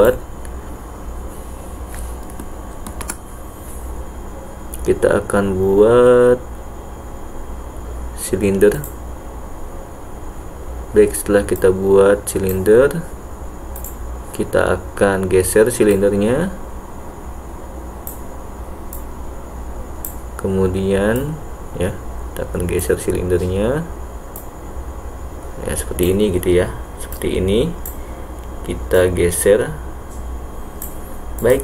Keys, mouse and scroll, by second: 3.0 shift+a, 11.8 click, 13.8 click, 16.0-18.2 drag, 19.0-20.2 drag, 21.3-22.9 drag, 24.5-26.2 drag, 27.2-28.1 drag, 29.0-30.9 drag, 31.4 click.